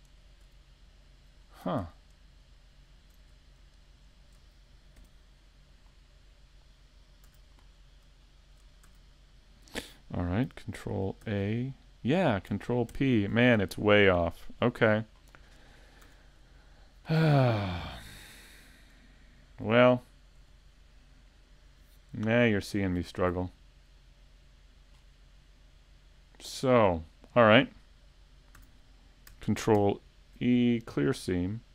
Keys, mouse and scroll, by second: 0.1 shift+right click, 0.5 middle click, 2.5 alt+shift+right click, 3.9 shift+right click, 5.0 u, 11.2 a, 15.3 shift+middle click, 15.3 scroll up 6, 16.0-16.4 scroll down 5, 16.1 a, 18.3 middle click, 19.7-20.1 scroll down 1, 20.1 shift+middle click, 25.2-26.0 scroll up 5, 26.0-26.6 scroll down 1, 26.6 scroll down 1, 28.4 scroll down 2, 29.8 ctrl+e.